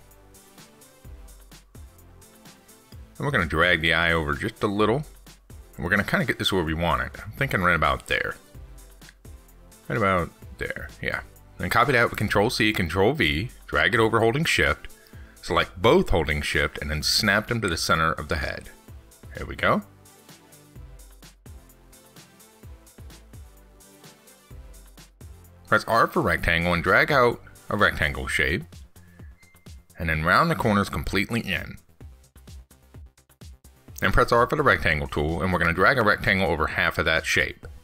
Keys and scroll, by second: 10.8 ctrl+z, 12.7 ctrl+c, 12.9 ctrl+v.